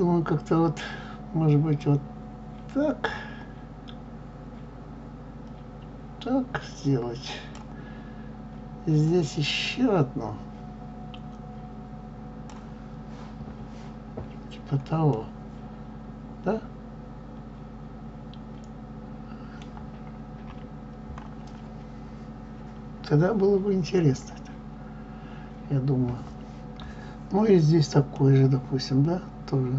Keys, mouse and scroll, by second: 15.0-18.1 middle drag, 20.3 KP_3, 28.1-29.7 middle drag.